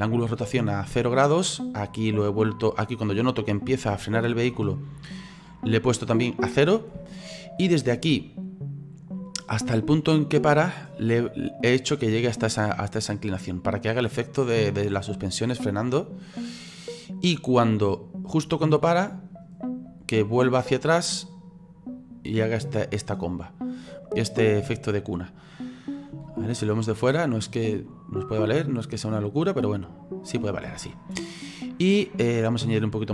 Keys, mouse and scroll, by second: 1.9-3.8 drag, 3.8-5.2 shift+middle drag, 5.2-7.1 drag, 7.1-9.1 shift+middle drag, 9.1-12.1 drag, 14.3-17.3 drag, 19.9-22.9 drag, 26.3 space, 30.7 space, 32.6 click.